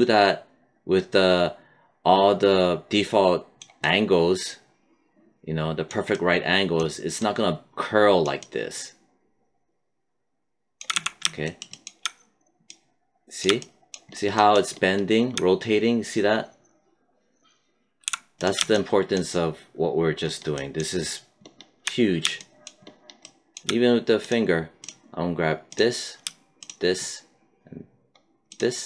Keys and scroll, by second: 10.8 z, 18.0 z.